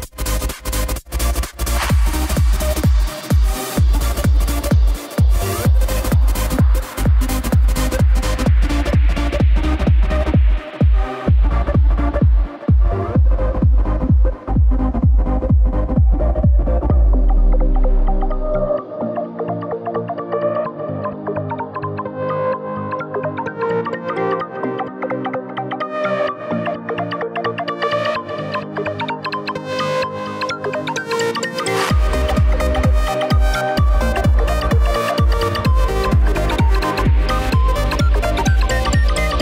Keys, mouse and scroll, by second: 3.7 KP_7, 5.7 r, 17.5 r, 25.4 click, 31.1 r.